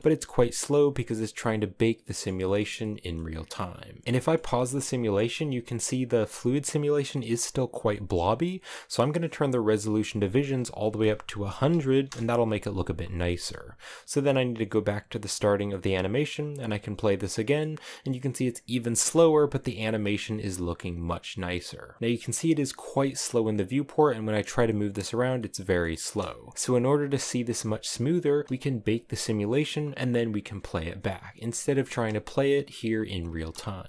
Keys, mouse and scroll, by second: 0.0-4.9 middle drag, 4.9-6.3 scroll up 1, 6.3 scroll up 1, 6.3-11.9 middle drag, 11.9 click, 12.6-13.0 scroll down 6, 13.0-15.0 middle drag, 15.0 click, 15.4-16.5 middle drag, 16.5 click, 17.3-19.6 middle drag, 19.6-20.4 scroll up 2, 21.8 scroll down 1, 21.9-24.5 middle drag, 25.8 middle click, 25.8 space, 28.2 shift+middle click, 28.2 space, 33.2 space.